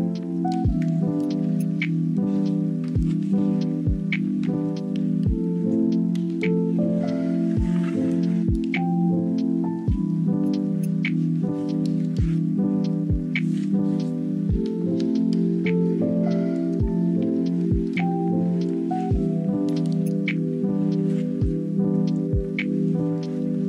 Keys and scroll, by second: 2.8 space, 5.0 ctrl+z, 5.3 space, 12.1 ctrl+z, 14.6 space, 15.4 space, 19.1 space, 19.4 ctrl+z, 20.4-22.1 typing, 23.3 space.